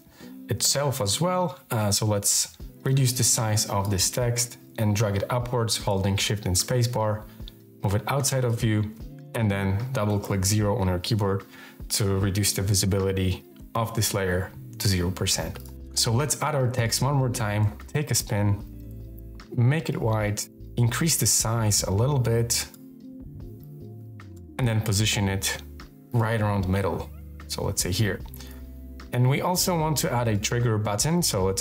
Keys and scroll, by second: 1.5 k, 6.4 shift+space, 9.9 o, 15.6 super+z, 15.7 t, 17.2-19.1 typing, 20.3 k.